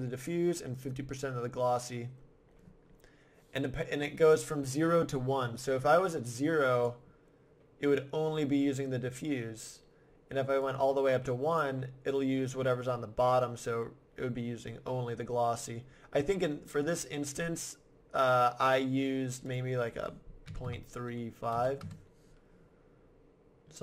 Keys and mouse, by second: 2.5-5.9 middle drag, 5.9 click, 6.0-7.9 middle drag, 10.6 middle click, 16.8 click, 17.8-18.8 drag, 19.5-21.3 drag.